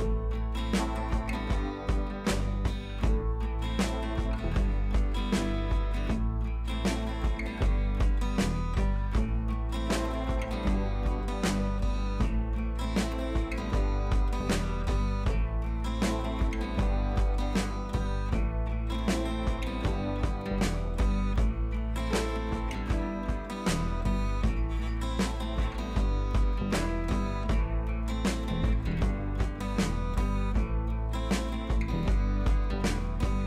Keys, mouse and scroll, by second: 0.6 right click, 1.1-7.7 drag, 5.5 click, 7.2-7.5 click, 14.1 click, 15.1 click, 21.9 scroll down 1, 23.5-26.3 drag, 26.5-27.7 alt+drag, 28.0 ctrl+t, 28.1 right click, 28.8 click, 29.8 scroll up 1, 30.7 scroll down 1, 33.1-33.4 drag.